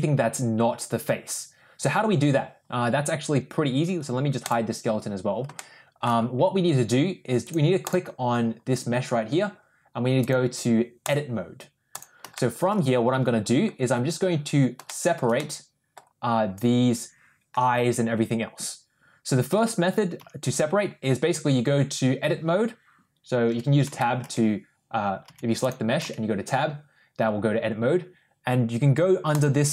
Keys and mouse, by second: 4.3 click, 5.4-5.9 shift+middle drag, 7.7 click, 10.2 click, 11.8 click, 12.2 shift+middle click, 14.8 shift+middle click, 15.2 middle click, 19.4 Tab, 20.1 Tab, 23.3 Tab, 23.8 Tab, 24.1 Tab, 25.1 Tab, 25.9 Tab.